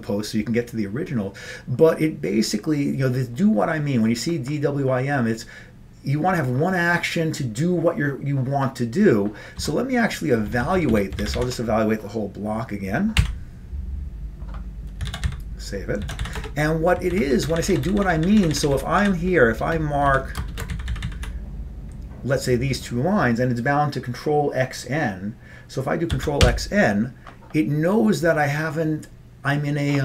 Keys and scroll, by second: 9.7 Page_Down, 10.7 Down, 10.8 Down, 11.0 Down, 11.4 ctrl+c, 11.4 ctrl+c, 13.3 y, 15.2 ctrl+x, 15.3 ctrl+s, 16.1 ctrl+x, 16.3 b, 16.5 Return, 17.3 ctrl+n, 17.5 ctrl+p, 17.7 ctrl+p, 17.8 ctrl+p, 17.9-18.7 ctrl+p, 19.1 ctrl+p, 19.7 ctrl+space, 20.2 ctrl+n, 20.5 ctrl+shift+space, 20.8 ctrl+n, 20.9 ctrl+n, 21.1 ctrl+n, 21.3 ctrl+n, 26.2 ctrl+x, 26.5 n.